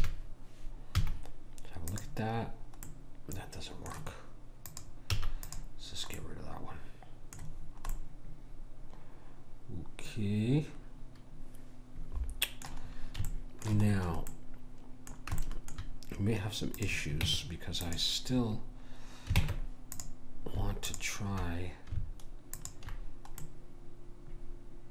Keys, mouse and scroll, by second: 0.0 a, 1.0 z, 4.7 click, 5.2 x, 6.2 right click, 6.7-8.9 middle drag, 12.9-13.3 scroll up 1, 13.3-15.0 middle drag, 16.8 click, 17.3 Tab, 19.4 ctrl+Tab, 20.9-24.5 drag, 23.5-24.7 middle drag.